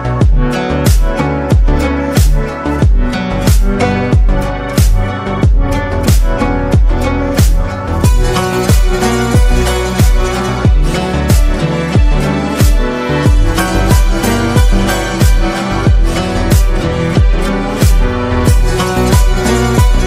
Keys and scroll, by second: 6.7 ctrl+z.